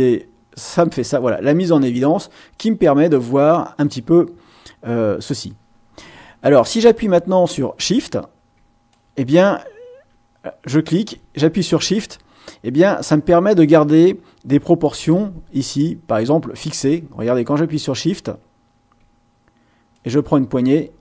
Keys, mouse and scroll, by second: 8.9 shift+click, 13.3-15.0 shift+drag, 19.9-21.0 shift+drag.